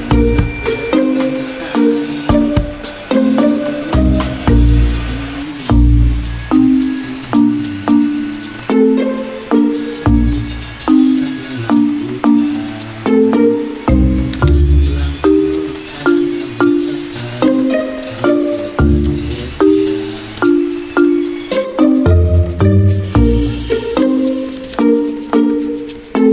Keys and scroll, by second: 19.1-20.0 typing, 23.1 F9.